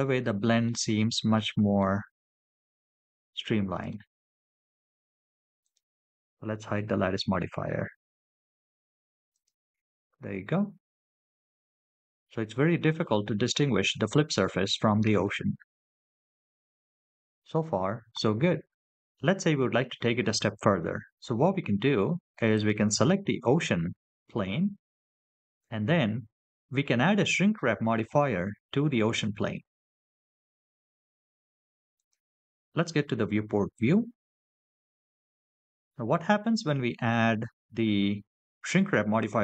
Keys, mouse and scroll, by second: 1.2 middle click, 2.2 scroll down 3, 3.2 middle click, 5.7 click, 6.6 h, 9.1 click, 22.3 click, 25.2-25.7 scroll down 4, 26.5-28.7 scroll up 1, 32.3 click.